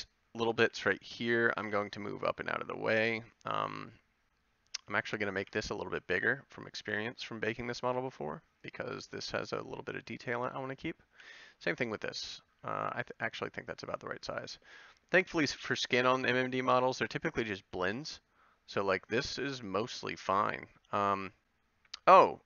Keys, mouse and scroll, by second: 0.7 b, 1.7 g, 4.7 a, 5.4 b, 6.1 s, 7.9 g, 9.5 g, 10.7 a, 11.1 b, 11.9 g, 13.9 click, 14.1 a, 18.0 Tab.